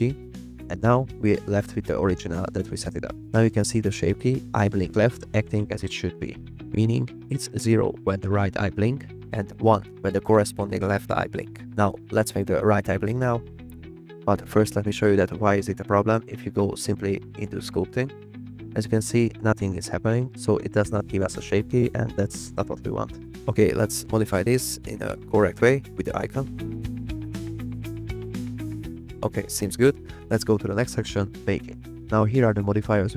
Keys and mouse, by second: 0.2 drag, 10.0 click, 13.8 click, 14.4-15.7 drag, 16.1 click, 16.6 drag, 17.3-18.2 drag, 19.2 click, 24.8 click, 26.1 f, 26.6 click, 27.2 click, 28.4 click, 30.3 click, 31.3 click.